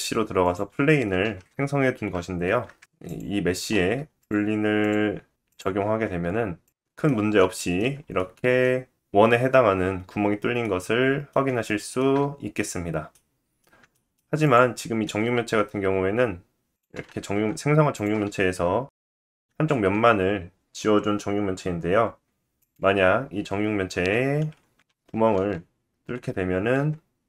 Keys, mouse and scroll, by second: 0.8 s, 1.9 click, 2.2 click, 3.3 click, 3.7-5.4 drag, 5.9 middle drag, 6.1 click, 6.9-14.2 middle drag, 14.2-14.5 drag, 14.5-15.7 middle drag, 15.4 x, 15.7 click, 15.9 shift+middle click, 16.0 shift+d, 16.8 drag, 17.0 middle drag, 17.2 drag, 17.6 Tab, 17.9 click, 18.7 x, 19.4 Tab, 20.8-21.6 drag, 21.6-25.5 middle drag, 21.6 r, 22.5 g, 25.5 click, 25.5 middle click, 26.0-27.2 drag.